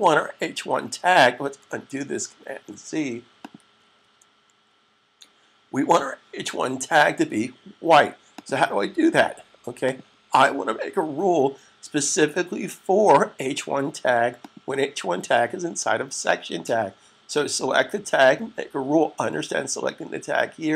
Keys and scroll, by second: 2.4 super+z, 3.6 super+z, 6.1 super+s.